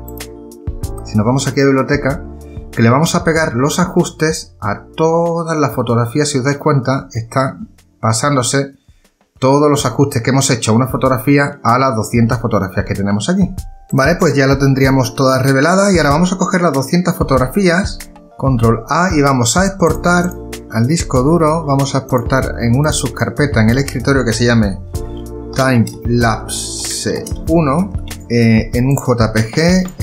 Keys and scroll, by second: 17.8 shift+a, 18.6 ctrl+a, 25.3-28.4 typing.